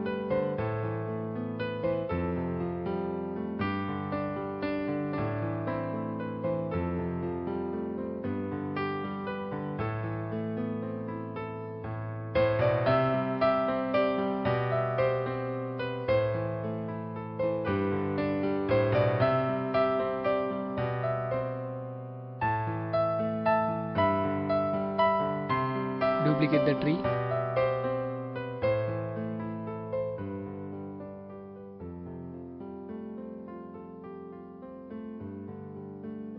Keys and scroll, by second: 0.0-0.5 typing, 2.3 space, 3.5-4.3 typing, 5.5 ctrl+0.